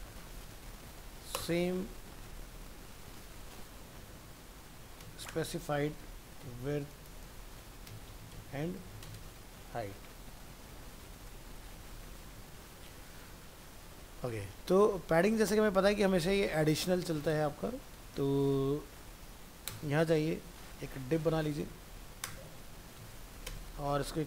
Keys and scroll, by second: 11.0 ctrl+s.